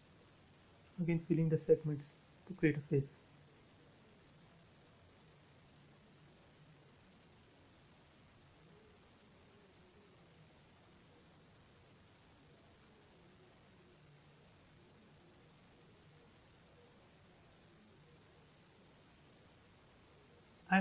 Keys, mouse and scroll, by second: 0.0 l, 2.3 click, 2.9-3.8 scroll up 1, 4.0 click, 4.9 space, 5.0-5.7 scroll down 1, 5.9 shift+middle click, 6.6-7.5 scroll up 1, 7.5 l, 7.8 click, 8.7 space, 9.8 a, 10.5 click, 10.8 scroll down 1, 12.2 space, 13.9 click, 14.9-15.8 scroll up 1, 16.5 m, 17.4 scroll up 1, 17.9-19.1 scroll up 1, 19.1 click, 19.5 scroll down 1.